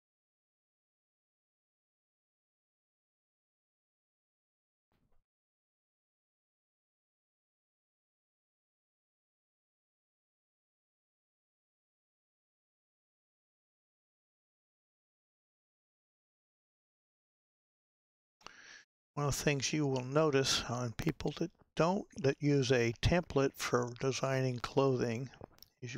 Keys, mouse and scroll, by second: 0.8-5.3 drag, 5.3-6.3 scroll up 3, 6.3-12.7 middle drag, 12.7-13.5 drag, 13.5-16.5 middle drag, 18.2-25.9 middle drag.